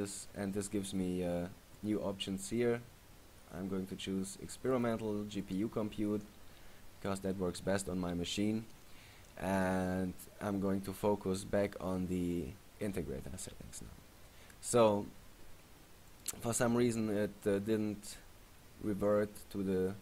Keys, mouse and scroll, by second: 1.1 click, 4.9 click, 9.2-10.1 scroll down 2, 10.1-10.9 scroll down 2, 10.9-11.6 scroll down 1, 12.4-13.1 scroll down 5, 16.3 click.